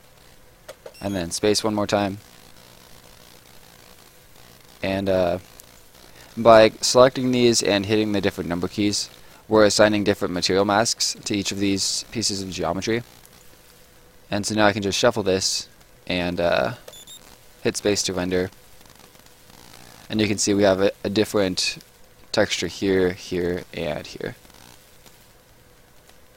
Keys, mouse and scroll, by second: 0.7 space, 1.7 right click, 9.5 click, 10.3 click, 11.2 click, 12.7 right click, 14.8 click, 16.2 right click, 16.7 space, 17.3 right click, 25.9 click.